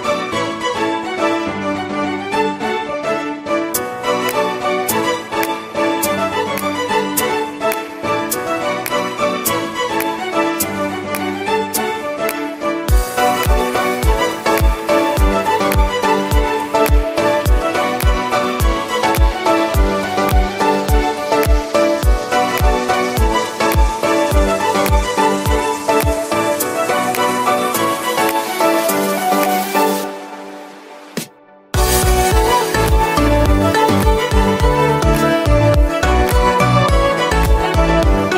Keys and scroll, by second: 13.9 2, 15.9 Return.